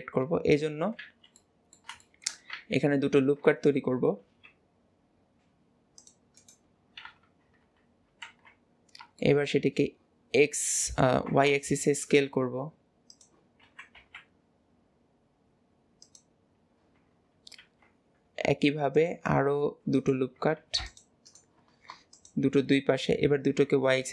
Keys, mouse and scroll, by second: 0.5 scroll up 1, 0.6 scroll down 2, 1.0 alt+z, 1.4-2.6 middle drag, 7.1 KP_1, 7.7 KP_3, 8.3 alt+z, 8.8-9.3 scroll up 2, 9.3 shift+middle click, 9.9-11.1 scroll up 1, 11.1 s, 16.5-17.6 scroll down 1, 17.6 ctrl+r, 20.6 ctrl+r, 22.2 alt+shift+click, 23.1-23.5 scroll up 1, 23.5 s.